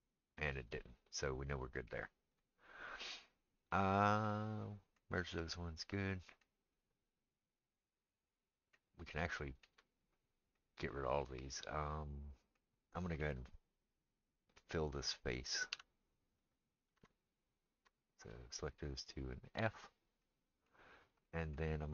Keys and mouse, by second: 2.3 click, 2.4-17.3 middle drag, 15.7 3, 16.9 2, 17.3 click, 17.4 middle click, 18.1 shift+click, 18.2-21.9 shift+middle drag, 19.6 f.